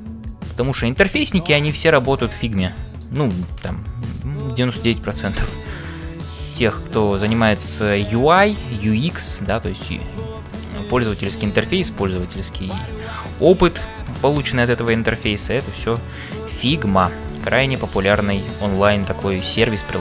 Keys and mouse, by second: 0.3 middle click, 1.9 shift+middle click, 2.7 middle click, 3.4 click, 4.0 middle click, 6.3 middle click, 7.2 click, 7.6 middle click, 8.3 g, 9.4 middle click, 10.5 shift+middle click, 10.9 middle click, 12.0 middle click, 12.7 middle click, 14.0 click, 14.7 middle click, 16.6 click, 17.2 f, 18.6 shift+middle click, 19.0 middle click, 19.8 middle click.